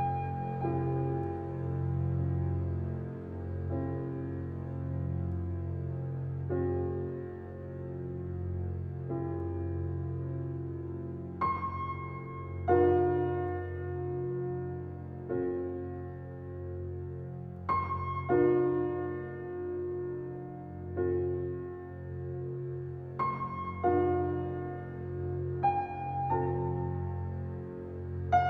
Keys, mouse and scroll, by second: 0.1 scroll down 1, 1.1 scroll up 1, 1.6 click, 1.9 scroll up 1, 2.3-3.0 scroll down 1, 3.0-4.3 scroll up 1, 4.3 click, 4.5 scroll down 1, 6.8-7.7 scroll down 1, 7.7-13.0 shift+drag, 13.0 scroll down 1, 13.5 scroll up 1, 14.3-23.5 drag, 23.5 scroll down 1, 23.9-24.3 scroll up 1, 24.3-25.6 scroll down 1, 26.4 scroll up 1.